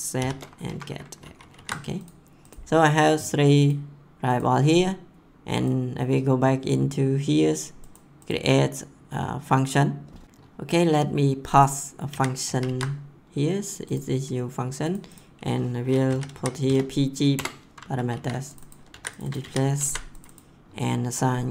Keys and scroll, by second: 0.0-0.1 typing, 0.6 Right, 1.2 ctrl+s, 10.2 ctrl+c, 12.0 ctrl+v, 12.4 ctrl+s, 15.8-16.8 typing, 17.3 Return, 17.9 ctrl+s, 18.9 ctrl+c, 19.4 ctrl+v, 19.6 ctrl+s.